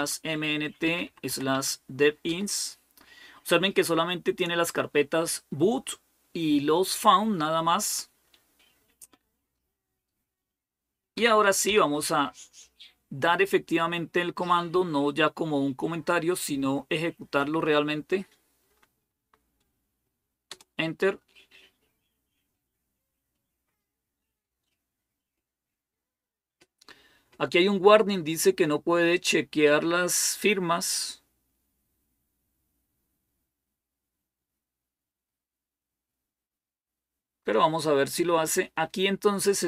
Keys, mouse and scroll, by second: 0.0-2.6 typing, 4.1-4.9 typing, 11.0 Up, 11.5 Up, 12.4 Left, 13.1 Left, 13.3-17.2 Left, 18.5 Delete, 18.8 Delete, 20.3 Return.